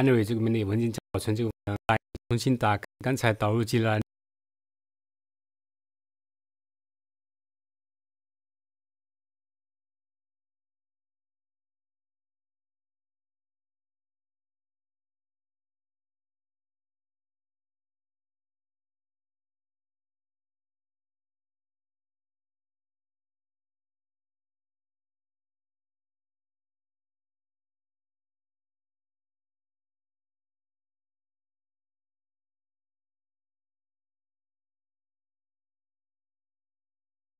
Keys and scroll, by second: 0.9 Right, 1.5 Right, 1.9 Right, 1.9 Right, 2.1 Right, 2.8 Right, 4.0 Right, 4.1 Right, 8.4 ctrl+w, 10.7 ctrl+w, 11.1 super+1, 12.4 super+2, 13.4 ctrl+t, 14.6 super+1, 22.0 super+2, 30.4 super+1, 32.0 super+2.